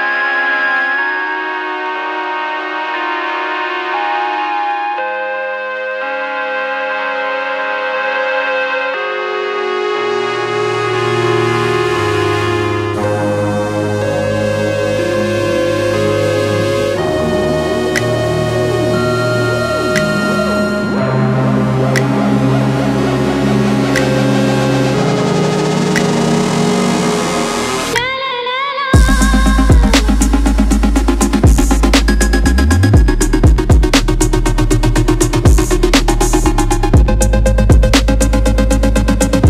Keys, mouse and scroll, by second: 3.2 click, 5.1 s, 5.9 shift+middle click, 6.2 alt+click, 6.6 s, 7.0 click, 7.3 g, 8.1 alt+click, 8.4 s, 9.7 scroll down 1, 9.8-11.1 middle drag, 10.3 KP_0, 10.5 scroll up 1, 11.1 click, 11.9 s, 13.2 shift+middle click, 13.5 alt+click, 13.7 s, 14.5 shift+middle click, 14.8 alt+click, 15.0-18.2 typing, 15.6 click, 16.3 click, 17.7 click, 17.9 alt+middle click, 18.4 scroll up 1, 18.6 click, 18.7-22.9 middle drag, 18.9 scroll up 1, 19.8 KP_0, 20.2-20.9 scroll up 1, 22.9 alt+click, 23.3 middle click, 23.4-23.8 scroll up 1, 23.8 alt+click, 25.3 KP_0, 26.0 click, 26.4 3, 26.6 click, 26.9 middle click, 27.2 KP_0, 27.3 scroll up 1, 27.8 click, 28.6-29.0 scroll down 1, 29.0 e, 29.6 click, 29.9-31.4 shift+middle drag, 30.5 KP_0, 30.7 scroll up 1, 30.8 scroll down 1, 31.1 scroll up 1, 31.4 click, 31.7 r, 32.0 ctrl+z, 32.2 e, 33.3-33.9 scroll down 1, 37.3-39.4 drag.